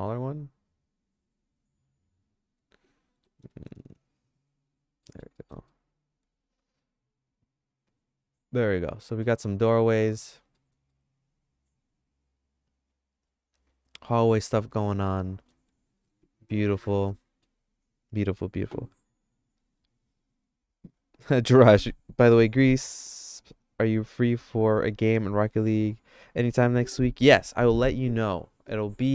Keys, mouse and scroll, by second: 3.2 g, 5.0 middle click, 5.4 middle click, 5.8-9.3 shift+middle drag, 10.6 middle click, 10.9-15.5 shift+middle drag, 16.0 ctrl+s, 17.1 middle click.